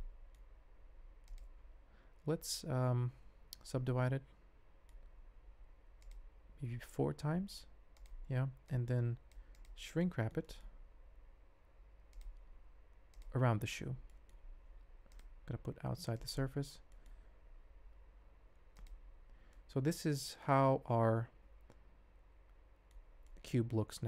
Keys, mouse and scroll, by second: 0.5 alt+z, 0.8 g, 1.6 ctrl+a, 3.0 ctrl+2, 3.6 ctrl+3, 3.8-4.9 middle drag, 6.7 ctrl+4, 10.0 middle click, 10.4 middle click, 10.8 alt+z, 12.1 click, 13.7 alt+z, 14.1 middle click, 15.2-16.4 drag, 16.7 shift+z, 16.9 shift+middle click, 17.3 alt+z, 18.7 click, 19.5-22.9 middle drag, 23.2-24.0 middle drag.